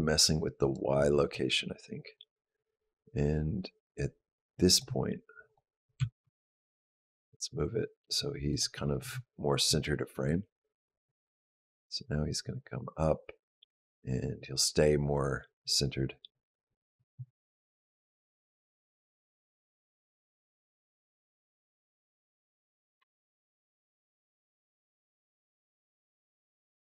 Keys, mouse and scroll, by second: 0.4 click, 2.0 click, 5.3 click, 5.8 g, 10.1 click, 22.8 space.